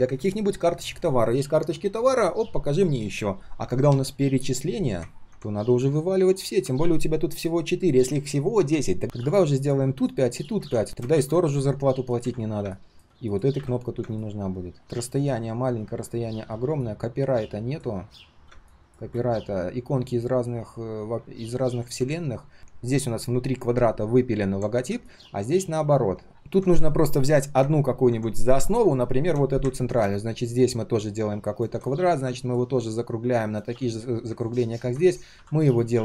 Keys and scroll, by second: 9.0 ctrl+z, 10.6 ctrl+z, 11.1 ctrl+z, 26.3 ctrl+z.